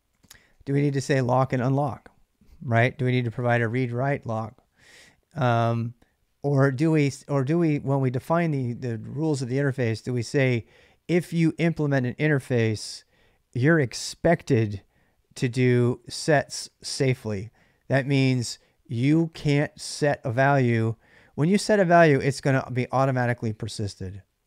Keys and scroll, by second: 0.0-1.4 typing, 6.6 ctrl+[, 6.6 ctrl+j, 6.7 k, 15.3-17.4 typing, 21.3 l, 21.5 l, 21.8 l, 23.0-24.4 typing.